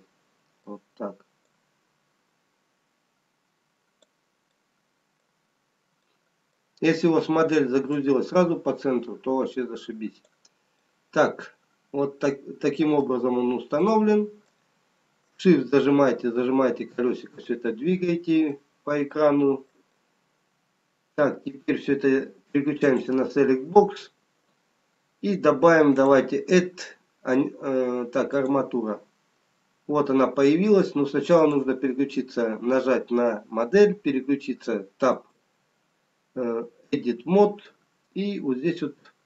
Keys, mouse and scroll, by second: 0.6 middle click, 2.1 click, 5.1 middle click, 6.5 middle click, 6.5-7.8 scroll down 2, 8.4 click, 11.1 middle click, 13.8-14.7 scroll up 2, 16.0 shift+middle click, 18.2-18.6 scroll up 2, 20.9 shift+middle click, 20.9-22.0 shift+scroll up 1, 23.0 click, 31.5 click, 37.7 Tab.